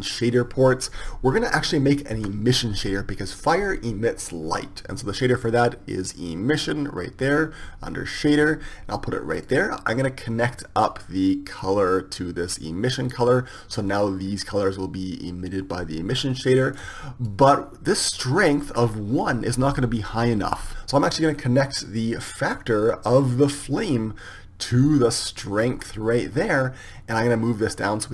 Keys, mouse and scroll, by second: 2.4 shift+a, 12.1-19.2 drag, 24.6-26.7 drag, 27.9-28.1 drag.